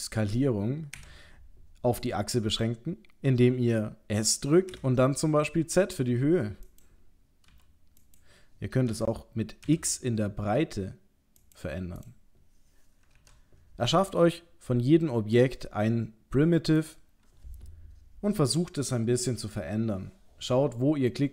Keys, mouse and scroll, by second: 12.0 click, 13.1 shift+a.